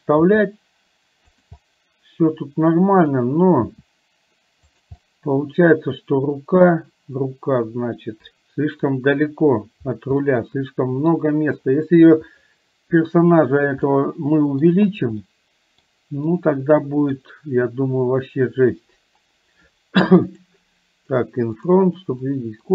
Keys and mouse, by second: 1.7-3.1 middle drag, 5.0-9.0 middle drag, 10.2-11.2 middle drag, 13.9 middle click, 15.4 middle click, 16.4 middle click, 22.4 middle click.